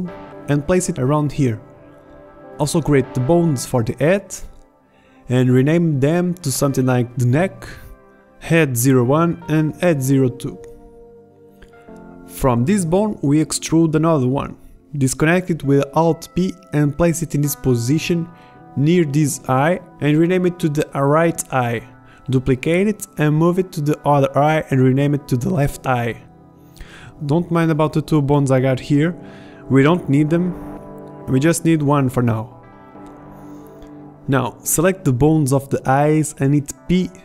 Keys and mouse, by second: 1.4 middle click, 1.6 middle click, 1.8 middle click, 3.0 ctrl+z, 3.1 e, 3.8 KP_1, 3.8 g, 6.7 e, 10.4 ctrl+z, 10.4 f, 10.4 g, 12.8 e, 15.0 KP_7, 17.0 alt+p, 17.6 g, 19.2 r, 20.0 middle click, 20.5 g, 23.0 shift+d, 29.4 b, 30.8 b, 33.2 middle click, 35.3 p.